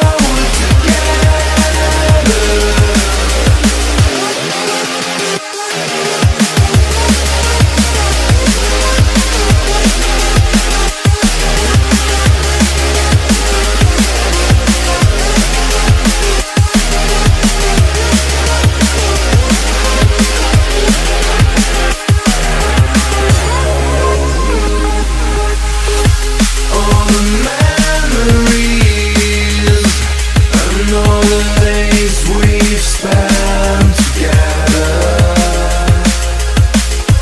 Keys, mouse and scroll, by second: 2.5 ctrl+c, 3.5 click, 6.5-10.5 drag, 11.2 ctrl+v, 12.2 click, 13.5 click, 16.3 ctrl+c, 17.1 click, 19.0 click.